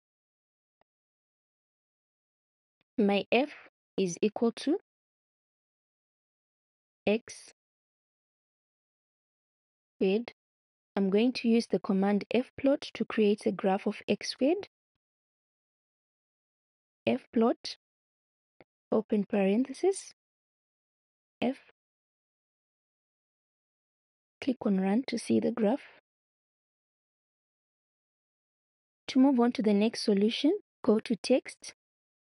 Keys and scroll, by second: 1.5 space, 1.6 x, 3.0 f, 3.9 =, 6.7 x, 8.8 shift+6, 9.7 2, 14.8-16.0 typing, 19.0 shift+9, 21.3 f.